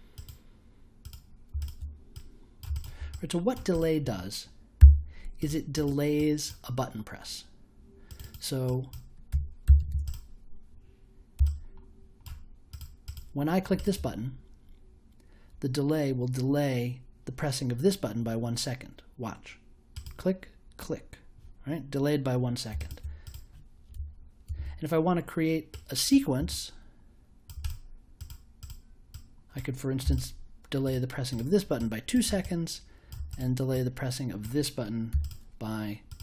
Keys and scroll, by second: 4.7 b, 9.3 1, 9.6 0, 24.4 super+j, 30.0 2, 35.1 3.